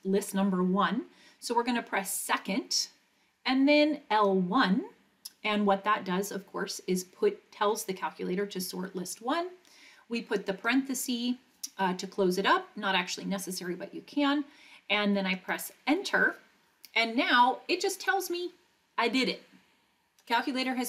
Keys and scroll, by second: 4.1 1, 10.5 ), 15.4 Return.